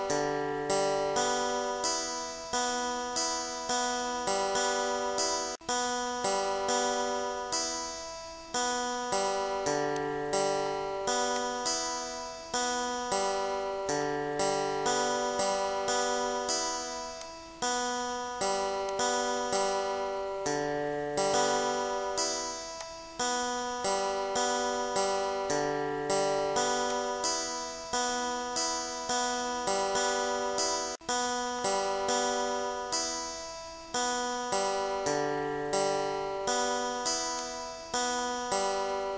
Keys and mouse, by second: 2.0 ctrl+d, 2.6 ctrl+shift+click, 9.0 click, 10.0 click, 10.7 click, 11.4 click, 12.8 2, 13.0 Return, 14.0 click, 14.6 4, 14.8 Return, 16.6 click, 17.2 click, 18.9 click, 19.6 click, 21.7 click, 22.8 click, 23.7 click, 26.4 click, 30.3 click, 31.6 click, 34.0 click, 37.4 click, 38.2 click.